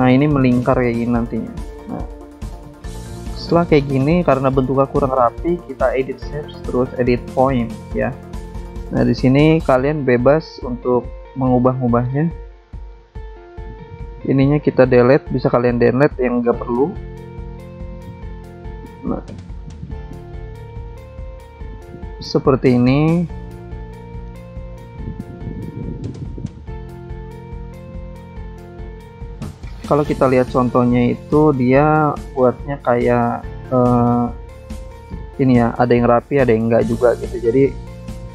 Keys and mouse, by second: 0.0 click, 0.9 click, 4.3 click, 5.5 click, 7.5 click, 8.8 click, 10.9 click, 12.3 right click, 13.2 click, 14.3 click, 15.7 click, 16.9 click, 18.4 click, 20.3 click, 21.7 click, 23.1 click, 24.5 click, 25.7 click, 27.1 click, 28.7 click, 29.8 click, 30.9 alt+Tab, 32.2 click, 34.5 click, 35.8 click, 37.4 alt+Tab.